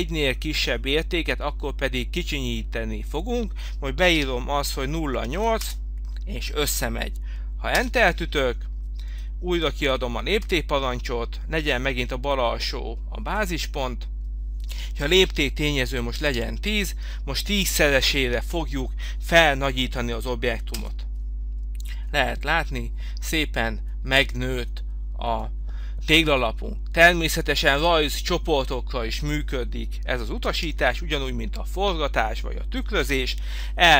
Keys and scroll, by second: 4.2 0, 5.6 Return, 17.6 1, 20.8 Return.